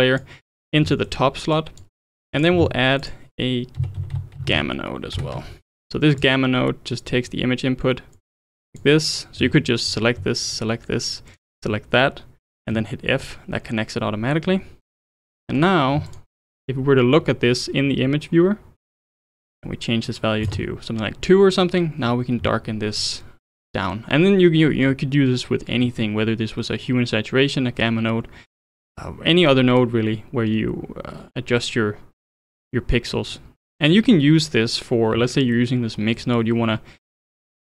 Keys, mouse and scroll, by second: 0.9-1.5 middle drag, 1.5 click, 2.0-2.3 middle drag, 2.3 click, 2.6 shift+a, 4.4 m, 7.1 click, 8.1 click, 9.6 ctrl+z, 9.9 click, 10.5 shift+click, 11.4 shift+click, 12.7 f, 14.3-14.6 middle drag, 14.6 scroll down 1, 14.9-16.1 middle drag, 16.1 ctrl+shift+click, 19.3-22.3 drag, 22.9-23.2 scroll up 1, 23.2-26.4 middle drag, 29.8-32.8 drag, 33.1 click, 33.9-37.6 middle drag.